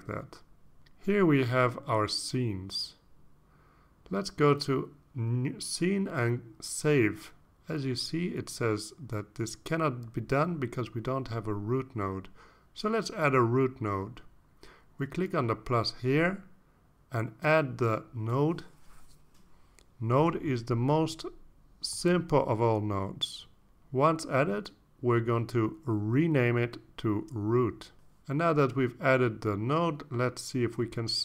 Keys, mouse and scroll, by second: 6.1 click, 7.2 click, 11.8 click, 17.1 click, 18.7-19.2 scroll up 1, 19.8 click, 24.1 click, 26.1 click, 27.4-28.7 typing, 29.5 Return.